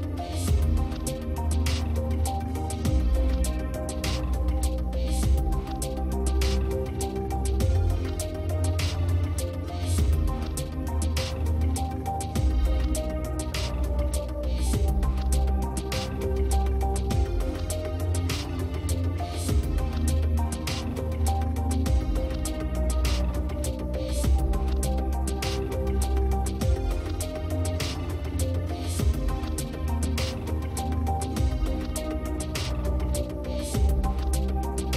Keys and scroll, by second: 30.6 space.